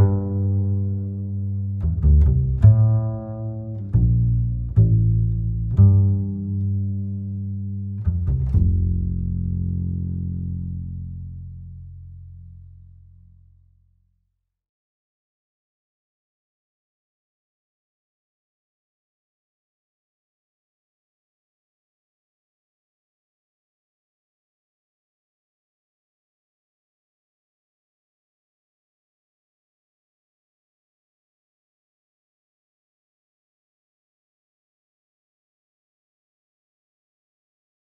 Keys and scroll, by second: 17.4 Down, 18.3 KP_1, 18.7 KP_0, 19.6 KP_Decimal, 21.0 KP_3, 21.6 Return.